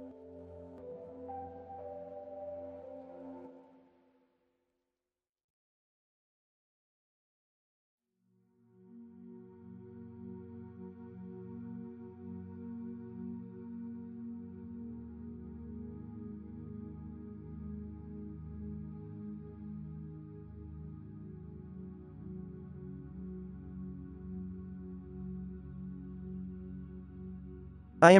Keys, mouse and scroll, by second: 3.1-3.5 middle drag, 3.8-4.3 middle drag, 4.3 b, 5.5 ctrl+l, 6.1 middle drag, 6.4 f, 7.7 f, 8.3 f, 10.7 f, 10.8-11.4 drag, 11.6 f, 13.0-16.1 drag, 13.5 f, 16.0 f, 16.6-20.2 drag, 16.9 f, 18.3 f, 20.3 alt+a, 20.7 z, 25.8 click, 26.2 alt+a.